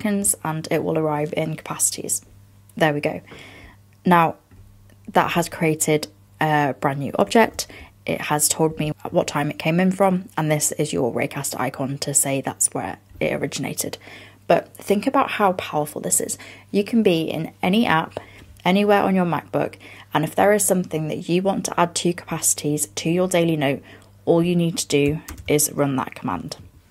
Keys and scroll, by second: 7.6 super+[, 25.5 super+space.